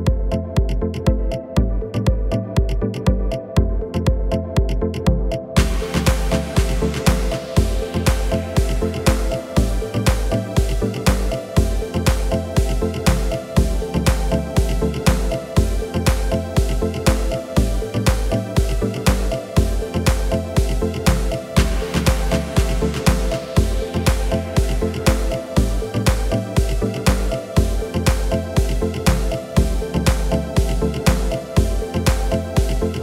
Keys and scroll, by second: 0.4 s, 3.1 g, 15.2 ctrl+z, 17.5 ctrl+KP_Add, 18.5 ctrl+z, 27.6 ctrl+shift+z.